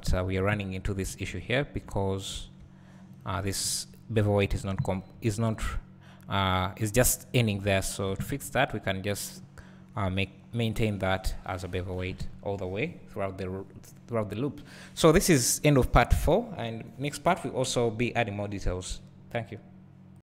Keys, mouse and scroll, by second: 0.4 alt+a, 1.1 `, 1.6 scroll down 1, 1.9 `, 3.2 alt+click, 3.7 `, 5.2 ctrl+e, 8.5 `, 9.4-11.4 scroll up 2, 11.4-11.9 scroll down 2, 11.9-14.2 scroll up 2, 17.3-20.3 scroll down 2.